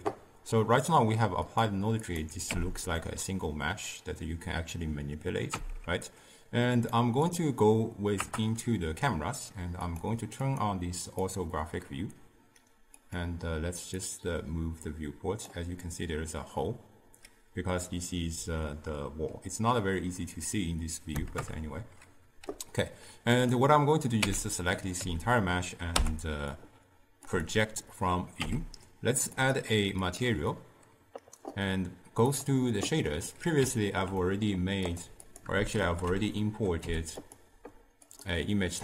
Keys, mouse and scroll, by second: 1.5 click, 2.1 click, 2.6 Tab, 3.1-5.6 middle drag, 5.6 Tab, 6.8 click, 7.3 click, 8.2 KP_0, 9.9 click, 10.5-13.2 drag, 14.0-17.1 drag, 17.9-21.1 middle drag, 21.4 KP_0, 23.4 click, 24.3 Tab, 25.0 a, 26.0 u, 28.4 Tab, 29.4 click, 30.1-35.0 drag, 35.8 ctrl+t, 38.2-38.8 drag.